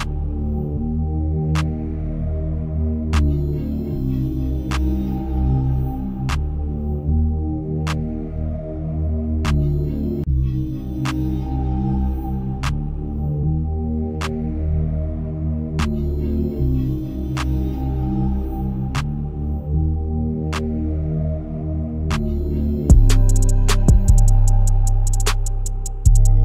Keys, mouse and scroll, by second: 3.3-5.8 scroll up 1, 5.8-6.7 scroll up 1, 6.7-8.5 drag, 8.5-8.9 scroll up 1, 8.9-10.3 shift+middle drag, 10.3 drag, 10.5-13.3 scroll down 1, 13.3-16.2 drag, 16.2-17.0 scroll down 3, 17.0-17.4 scroll down 1, 17.4-26.4 drag.